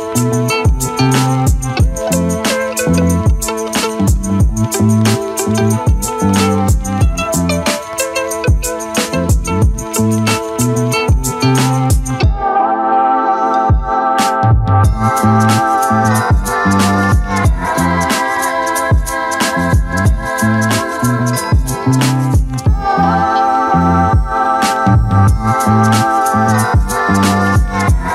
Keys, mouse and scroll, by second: 0.4 shift+click, 0.9 shift+click, 1.0 alt+click, 1.8 shift+click, 2.0 shift+click, 2.2 shift+click, 2.8 `, 3.3 click, 3.8-4.4 drag, 4.7 click, 4.9 click, 5.4 Tab, 5.7 alt+click, 7.2 click, 8.0 drag, 8.9 Tab, 9.0 alt+drag, 9.2 alt+middle click, 9.3 alt+right drag, 10.0 click, 10.1 alt+click, 10.3 alt+middle click, 10.9 click, 11.6 click, 12.5 click, 13.1 ctrl+z, 13.5 ctrl+click, 13.8 ctrl+z, 14.0 click, 14.3 click, 14.7 shift+click, 14.8 shift+click, 15.1 f, 15.2 click, 15.3 alt+click, 15.5 alt+right click, 15.7 alt+click, 16.6 click, 17.0 click, 17.1 alt+click, 18.3 alt+click, 19.2 click, 19.4 alt+click, 20.7 click, 20.8 alt+click, 22.9-23.7 alt+drag, 23.7 Tab, 23.9 alt+drag, 24.1 alt+right click, 24.2 alt+drag, 24.4 Tab, 24.6 `, 24.9 alt+middle click, 25.5 click, 26.1 shift+click, 26.7 shift+click, 27.4 shift+drag, 27.8-28.1 alt+drag.